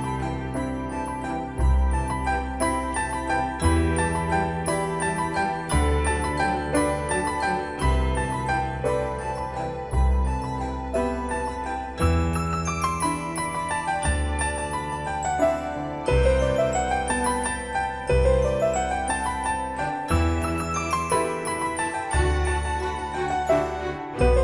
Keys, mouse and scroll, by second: 12.0 c, 13.3 click, 17.0 d, 21.3-22.4 typing, 23.1 Return, 23.8-24.3 scroll down 1.